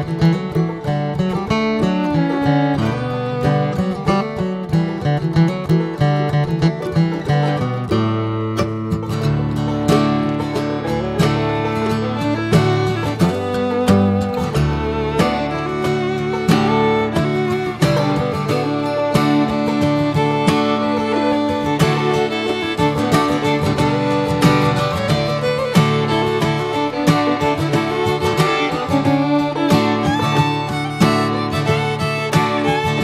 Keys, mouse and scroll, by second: 0.3-0.7 scroll up 2, 0.7 click, 0.9 Tab, 1.2 middle click, 1.3-3.3 scroll up 1, 3.3 Tab, 3.4 click, 4.6 click, 5.6-6.1 drag, 6.1-7.1 middle drag, 7.1 Tab, 7.6 Tab, 7.7 click, 8.3 Tab, 8.8-10.0 middle drag, 10.0 scroll down 1, 10.2 shift+middle click, 10.7 scroll down 2, 11.1 middle click, 11.6 Tab, 12.2 Tab, 12.4 click, 12.8 scroll up 1, 13.0-14.6 middle drag, 14.6 2, 15.4 click, 16.1 alt+shift+click, 17.1 click, 18.0 middle click, 18.7 scroll up 1, 19.0-20.3 middle drag, 20.3 click, 21.3 alt+shift+click, 21.7 alt+shift+click, 22.5 shift+d, 23.5 f, 23.9 scroll down 2, 24.4 Tab, 24.6 click, 25.1 Tab, 25.4 middle click, 25.6 scroll up 1, 26.4 s, 28.1 ctrl+z, 28.9 middle click, 29.7 s, 31.2 middle click, 31.5 alt+z, 31.7-33.0 middle drag.